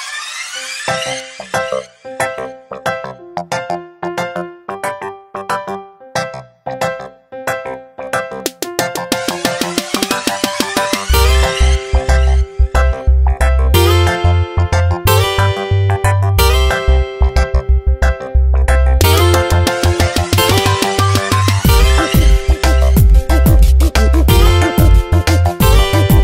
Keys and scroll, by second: 9.5 v, 15.7 Tab.